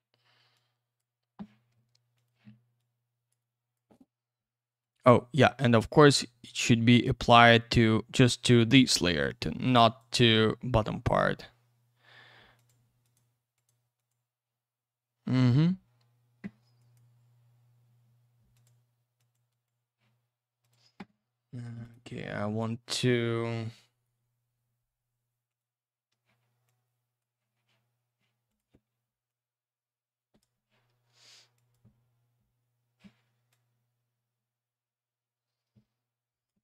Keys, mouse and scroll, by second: 0.5 click, 2.1 click, 2.2 click, 2.8 click, 3.4 click, 4.9 click, 5.8 click, 5.9 click, 8.4 click, 8.5 click, 8.8 click, 8.9 double click, 9.3 click, 9.4 click, 9.8 click, 10.0 click, 12.5 click, 12.7 click, 13.0 click, 13.1 double click, 13.5 click, 13.6 click, 14.0 click, 14.1 double click, 16.8 click, 16.9 click, 18.5 click, 18.6 click, 19.2 click, 19.3 click, 19.5 click, 19.6 double click, 20.6 click, 20.7 click, 21.8 click, 21.9 click, 23.9 right click, 24.0 right click, 25.5 click, 25.6 click, 26.7 click, 28.5 click, 28.6 click, 29.3 click, 31.5 click, 31.7 click, 33.5 click.